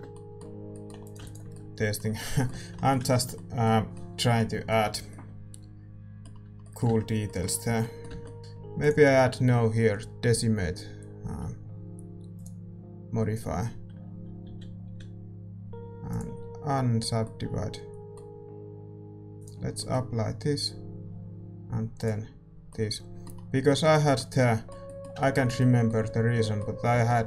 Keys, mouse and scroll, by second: 1.5 ctrl+s, 6.8 Tab, 7.6 a, 8.1 Tab, 8.4-12.4 middle drag, 14.8 z, 16.0-17.8 drag, 17.2-19.4 middle drag, 19.4-23.7 drag, 19.7-22.0 middle drag, 22.6-27.2 middle drag.